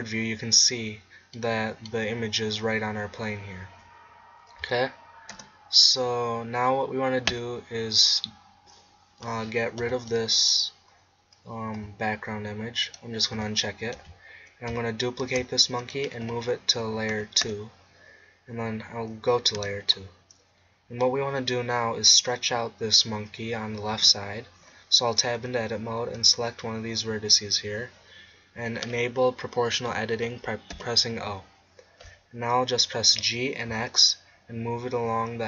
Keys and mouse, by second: 4.6 z, 5.3 KP_0, 9.9 n, 13.4 n, 14.0 z, 15.3 shift+d, 16.3 m, 17.5 2, 19.6 2, 24.0 Tab, 26.8-29.4 right drag, 30.8 o, 33.2 g.